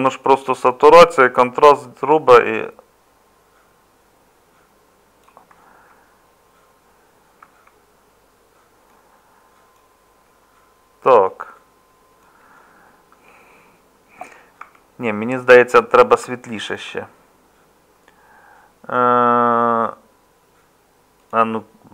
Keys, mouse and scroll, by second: 7.4 Tab, 14.6 Tab.